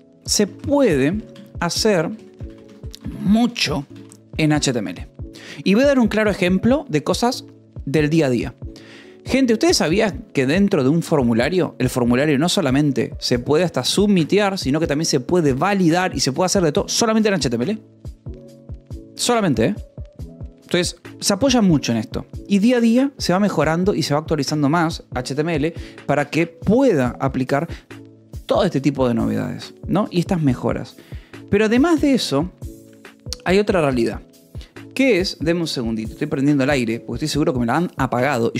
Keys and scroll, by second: 3.2 shift+s, 5.0 shift+e, 8.0-9.2 typing.